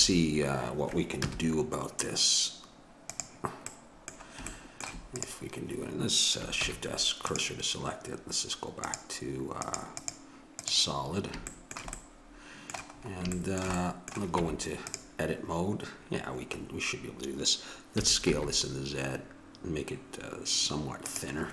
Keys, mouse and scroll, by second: 1.1 KP_0, 3.6-6.5 drag, 6.5 shift+s, 14.3 Tab, 18.0 s.